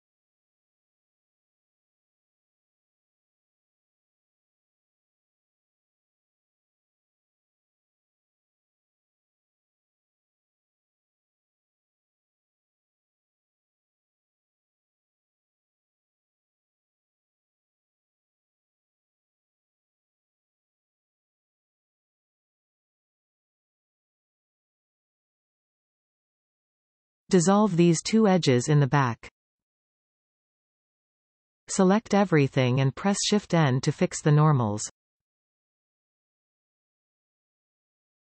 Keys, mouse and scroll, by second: 2.3 alt+shift+click, 3.4-5.6 middle drag, 5.6 f, 6.2-7.9 middle drag, 7.9 alt+shift+click, 8.9 f, 9.3 shift+middle click, 9.8-10.1 scroll up 4, 10.7 click, 11.2 shift+click, 11.8 shift+click, 12.1 shift+click, 12.8 shift+click, 13.6 f, 14.3 click, 14.9 shift+click, 15.2-16.2 middle drag, 16.2 shift+click, 16.5 shift+click, 17.7 f, 19.4 click, 19.9 shift+click, 20.3 shift+click, 20.6 shift+click, 21.6 f, 22.0 scroll down 2, 22.6-26.0 middle drag, 26.0 alt+a, 27.3 click, 28.0 click, 28.5 shift+click, 28.9 x, 31.4 a, 31.7-33.8 middle drag, 33.8-35.4 scroll down 1, 35.4 shift+n, 36.4 scroll down 1, 36.5-38.2 middle drag.